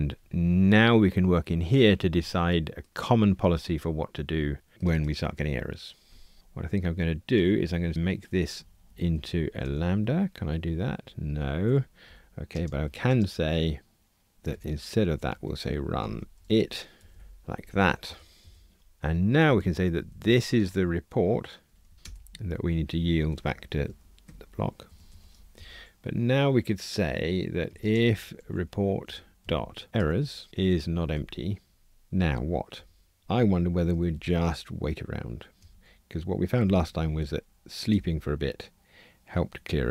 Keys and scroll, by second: 7.4 alt+Return, 24.2 Escape, 29.1 Return, 35.7 Return.